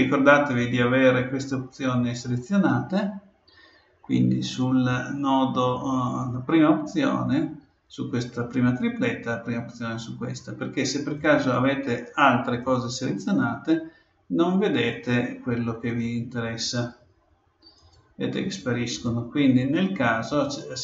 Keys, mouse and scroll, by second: 11.2-14.6 drag, 14.9-17.6 drag, 17.7-20.8 drag.